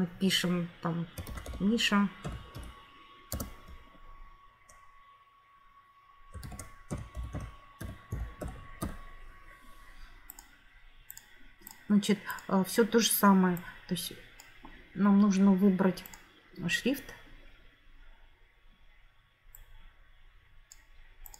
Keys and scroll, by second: 1.0-3.2 typing, 6.1-9.2 typing.